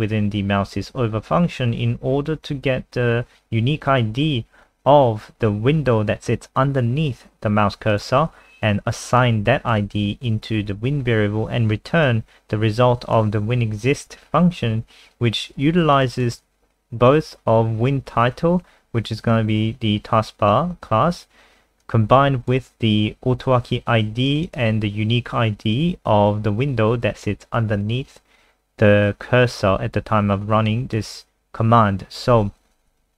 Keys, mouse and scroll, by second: 16.1 click, 21.8 click, 24.4 click, 30.7 click, 32.2 scroll up 1.